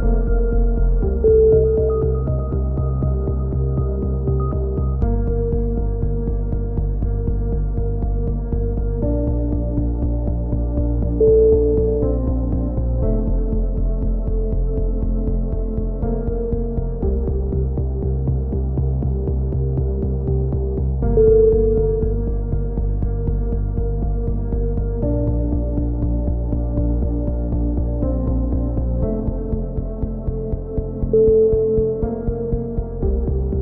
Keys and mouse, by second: 0.1 ctrl+r, 1.2 z, 1.5 click, 2.1-3.5 right drag, 2.9 x, 3.9-5.7 drag, 5.7 KP_3, 6.1 middle click, 6.2 z, 7.3 click, 9.7 s, 11.8-12.9 drag, 13.3 click, 15.4 middle click, 16.3 click, 17.9 s, 19.9-21.3 drag, 23.1-25.4 middle drag, 25.4 ctrl+l, 26.5 shift+d, 27.3 click, 29.2 click, 32.2 ctrl+z, 33.1 click.